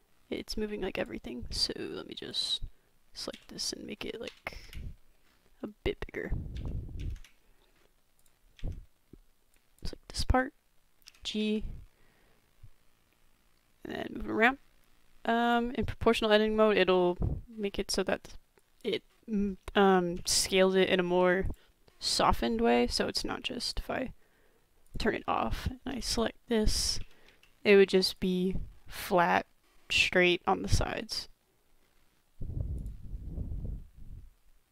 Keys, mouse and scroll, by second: 1.5 Tab, 2.2 click, 3.3 s, 6.5 s, 8.2 click, 8.6 Tab, 11.1 g, 12.8 b, 16.9 middle click, 17.7 middle click, 18.6 click, 19.1 middle click, 20.2 g, 21.8-22.3 middle drag, 23.6 click, 24.8 click, 25.3 shift+middle click, 26.0 click, 26.5 click, 27.0 g, 28.4 click, 28.5 middle click, 29.6 middle click, 30.0-31.3 drag, 32.1 middle click, 32.8 click.